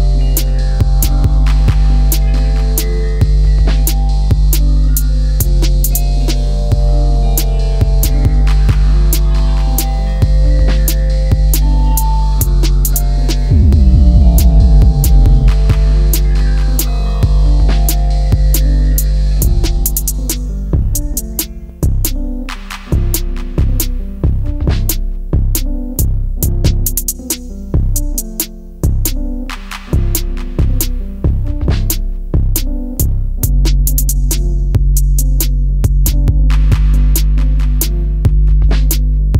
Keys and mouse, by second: 0.3 click, 1.8 ctrl+shift+b, 3.8 click, 4.3 right click, 6.8 s, 8.0 click, 8.4-9.5 drag, 10.6 click, 12.9 click, 14.1 Delete, 16.0 click, 17.3 middle click, 18.2-19.2 right drag, 19.5 middle click, 20.7 ctrl+z, 21.0-22.3 middle drag, 22.5 e, 24.3 click, 24.6 middle click, 25.6 click, 26.6 middle click, 28.6-29.0 middle drag, 29.4-29.9 middle drag, 30.6-31.5 middle drag, 32.1 click, 32.8 Tab, 33.3-34.9 middle drag, 35.2 KP_7, 37.2 click, 38.2 shift+middle click, 38.9-39.3 middle drag.